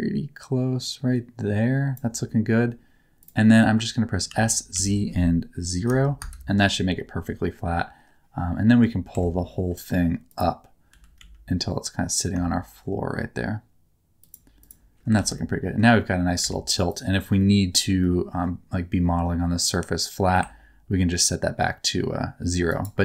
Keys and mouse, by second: 3.2-4.2 drag, 4.2 s, 4.7 z, 5.8 KP_0, 6.1 KP_Enter, 9.1 Tab, 10.2 click, 10.8 g, 11.1 z, 14.5 click, 15.1 alt+z, 15.3 middle click, 16.3 alt+a, 17.3 middle click, 17.9 middle click, 20.3-22.6 ctrl+drag.